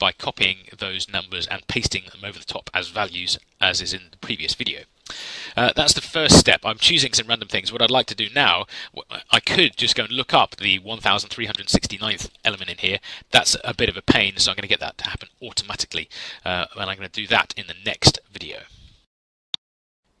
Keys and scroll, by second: 19.4 ctrl+F10.